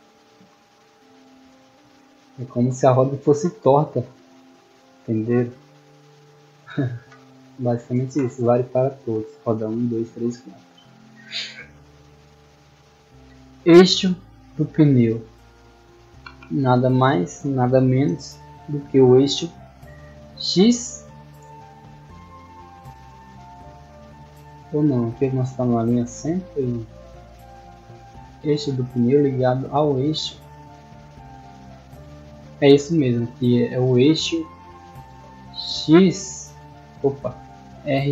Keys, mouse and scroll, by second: 0.0-2.8 typing, 4.3 a, 4.9 d, 10.4-12.2 scroll up 2, 12.2 scroll down 2, 12.8-15.8 middle drag, 23.4 middle click, 28.0-30.2 middle drag, 31.0-33.0 middle drag, 36.8 right click, 37.2-37.5 middle drag, 38.0 middle drag.